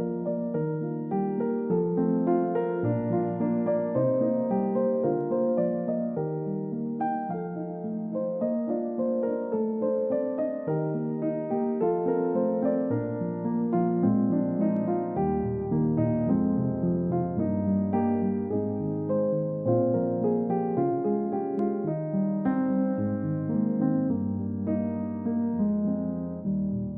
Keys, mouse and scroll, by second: 0.9 1, 1.2 Return, 3.3-5.5 scroll down 1, 8.4 middle click, 8.9-10.3 scroll up 1, 10.6-11.4 scroll down 1, 11.4 middle click, 11.8-12.2 scroll down 1, 12.2 middle click, 12.6 scroll up 1, 18.5-18.8 scroll down 1, 19.2-19.7 scroll up 1, 19.7-20.4 scroll down 2, 19.9 middle click, 22.8 Delete, 23.0 middle click, 23.3-23.8 scroll up 1, 23.8 middle click, 24.7-25.3 scroll up 1, 25.3 double click, 25.7 scroll down 1, 26.4 scroll up 1.